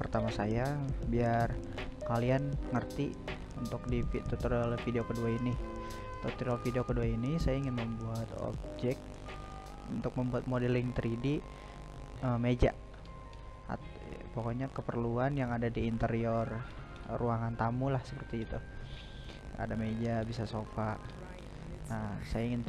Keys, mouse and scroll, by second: 0.9 click, 1.4 click, 2.1 click, 2.9-6.8 drag, 9.3-20.6 shift+middle drag, 20.6 shift+a.